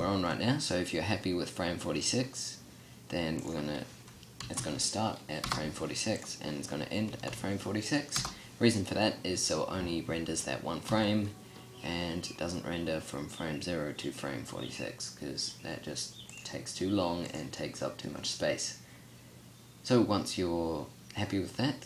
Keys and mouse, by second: 10.7 t, 16.1-21.8 drag.